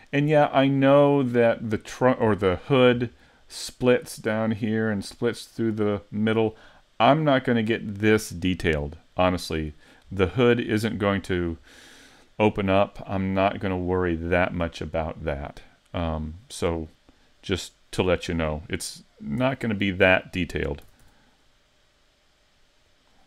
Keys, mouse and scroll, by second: 16.8 middle click, 19.4 e, 19.8 click, 20.9 s, 23.0 click.